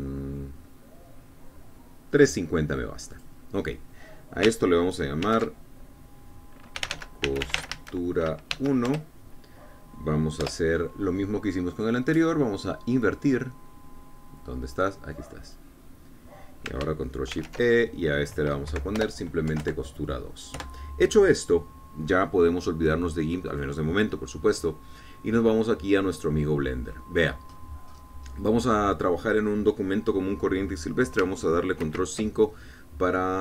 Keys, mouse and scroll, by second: 1.2 scroll down 1, 2.2 scroll down 1, 4.2 click, 6.3 ctrl+shift+e, 7.8-9.5 typing, 9.9 Return, 11.5 Return, 12.8 click, 16.5 click, 18.4 ctrl+shift+e, 19.7 Right, 20.0 BackSpace, 20.5 KP_2, 20.7 KP_Enter, 21.6 KP_Enter, 24.5 click, 26.0-28.2 middle drag, 28.2 scroll up 2, 28.5 click, 28.6 scroll down 2, 28.8 click, 29.0 scroll up 2, 29.4 scroll down 2, 29.7-30.1 scroll up 2, 30.8-31.1 scroll down 2, 32.9 ctrl+5.